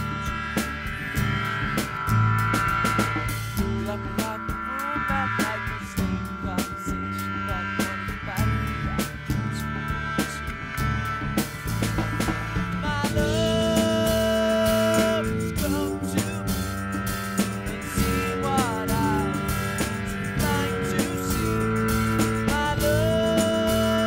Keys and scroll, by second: 8.2 super+=, 22.7 alt+super+].